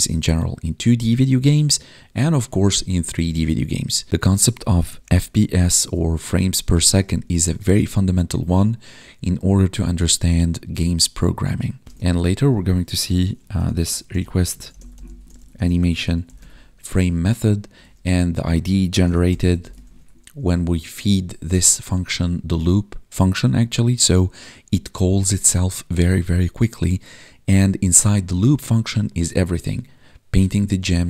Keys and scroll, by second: 6.6 space, 7.1 space, 12.0 ctrl+/, 19.8 ctrl+s.